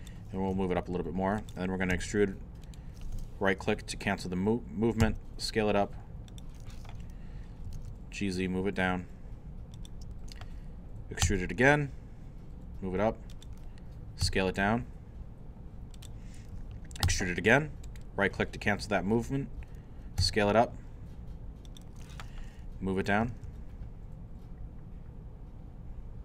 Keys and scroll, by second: 0.3-1.9 typing, 5.0 s, 7.4-8.3 typing, 11.2 e, 14.2 s, 17.0 e, 20.2 s, 23.0-23.9 typing.